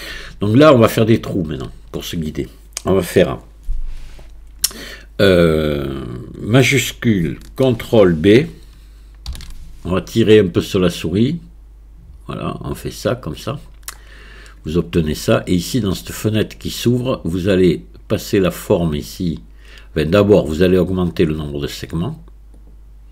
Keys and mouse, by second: 1.1 alt+click, 9.3 ctrl+shift+b, 18.4-21.1 drag, 22.1 click.